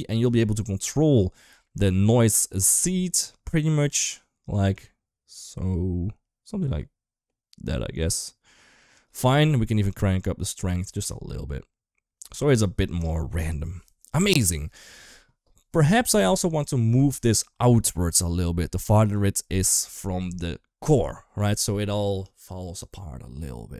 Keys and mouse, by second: 0.2-8.8 shift+drag, 9.1 shift+middle click, 9.7-12.3 shift+drag, 12.7 shift+middle click, 12.9-13.6 middle drag, 18.1 middle click.